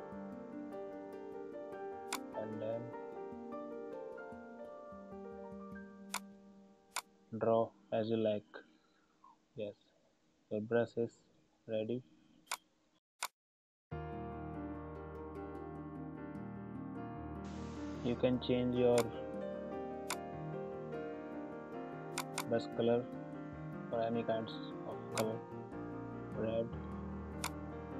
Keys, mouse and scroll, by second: 2.1-17.4 drag, 18.8 click, 25.1-27.3 drag.